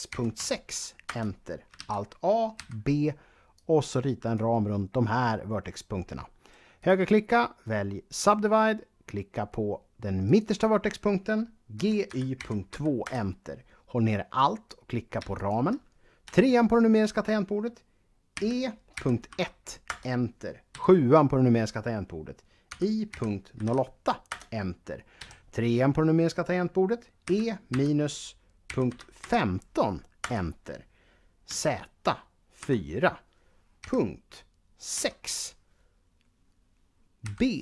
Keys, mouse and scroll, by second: 0.0-0.2 typing, 0.9 Return, 1.7 a, 2.3 b, 3.3 click, 6.6 right click, 7.8 click, 10.1 click, 11.6-12.5 typing, 12.9 Return, 15.2 alt+click, 16.0 KP_3, 18.2-19.1 typing, 19.7 Return, 20.6 KP_7, 22.5-23.5 typing, 24.1 Return, 25.0 KP_3, 27.0-27.5 typing, 28.8 typing, 30.0 Return, 31.3 z, 32.4-35.3 typing, 37.1 b.